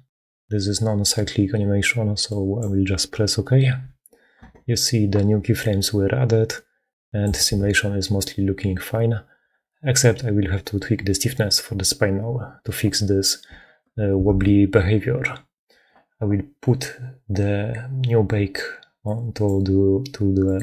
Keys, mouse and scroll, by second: 5.5-7.4 drag, 7.3 shift+space, 13.5 shift+space, 14.2 shift+space, 15.7 shift+space, 19.1 click, 20.3 click.